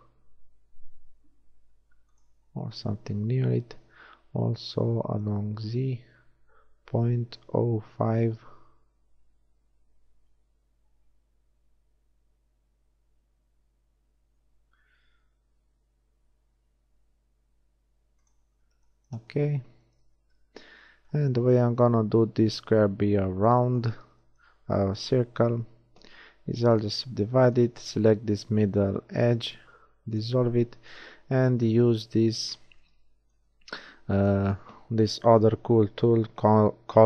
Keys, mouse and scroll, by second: 3.9 s, 20.2 z, 20.7 z, 21.5 z, 22.5 z, 26.1 w, 28.9 x, 30.9-32.9 drag, 32.9 b.